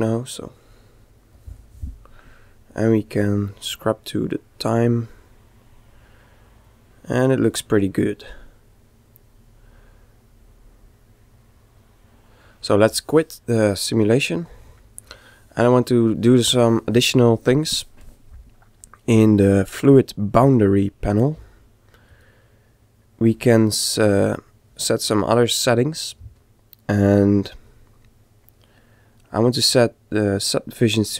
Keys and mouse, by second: 2.8 click, 14.1 click, 18.7-20.5 middle drag, 20.5-23.9 drag.